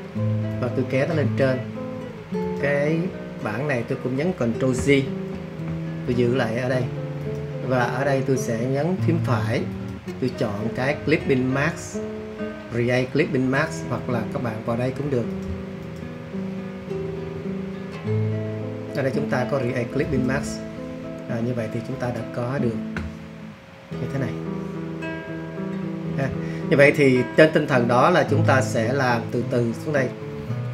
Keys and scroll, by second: 5.3 super+j.